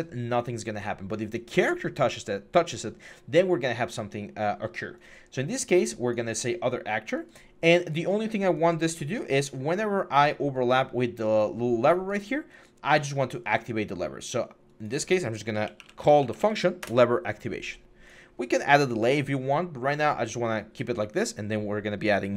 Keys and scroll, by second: 15.4-16.2 typing, 16.6 Return.